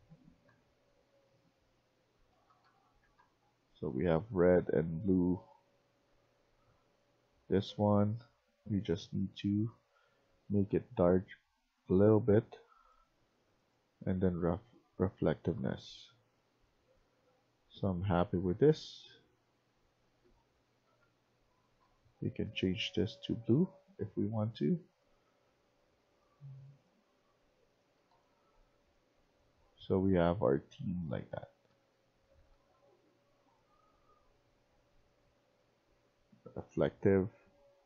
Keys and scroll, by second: 0.0-0.8 typing, 1.9-3.0 typing, 4.2-6.8 typing, 15.4-22.2 typing, 27.7-32.7 typing.